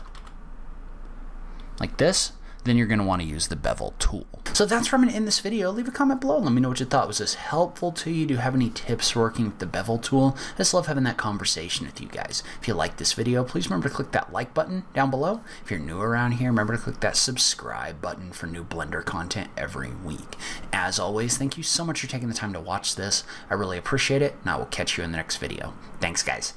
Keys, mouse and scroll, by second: 0.1 shift+click, 0.5 e.